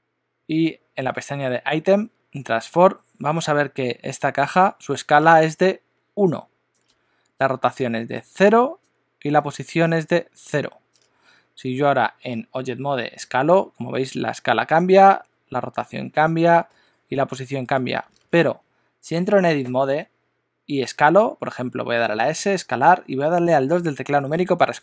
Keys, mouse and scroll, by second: 13.2 s, 15.1 r, 16.7 g, 19.7 Tab, 22.4 s.